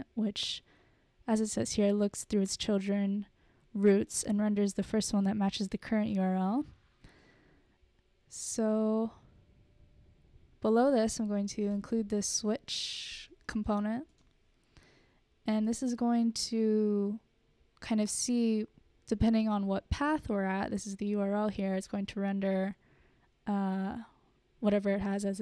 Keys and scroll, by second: 11.7 Return, 11.9 Return, 12.0-14.2 typing, 13.8 Return, 14.8 Return.